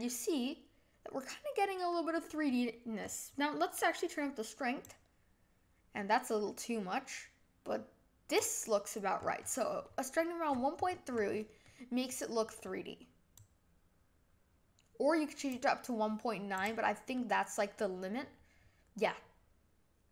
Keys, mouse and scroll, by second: 3.0-3.3 scroll up 1, 3.3-4.1 scroll down 1, 4.1-4.8 scroll down 1, 4.8 scroll down 1, 4.9-9.2 drag, 9.2-10.4 scroll up 5, 10.5-10.8 scroll down 8, 10.8-11.6 scroll up 4, 11.6-13.5 middle drag, 13.5-16.6 drag, 17.1-20.1 middle drag.